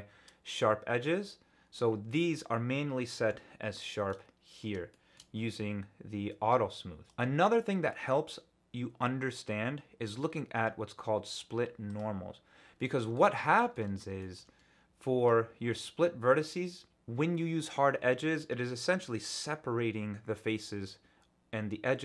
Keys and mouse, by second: 4.1 middle click, 4.9 shift+middle click, 7.0-12.6 drag, 12.8 middle click, 13.3 shift+click, 14.2 shift+click, 15.0 click, 16.5 click.